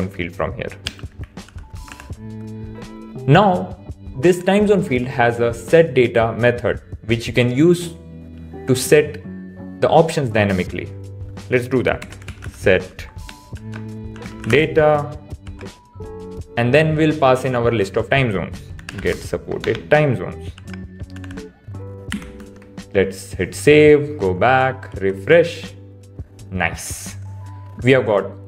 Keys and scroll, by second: 0.8 BackSpace, 15.4 shift+(, 20.5 shift+(, 21.2 Right, 22.5 super+s, 24.9 super+r.